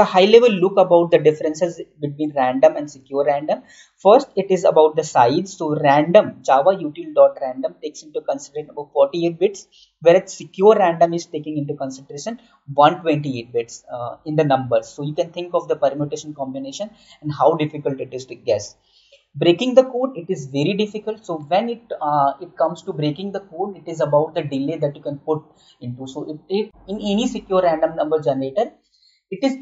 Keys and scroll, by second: 2.9 Right, 17.9 Right.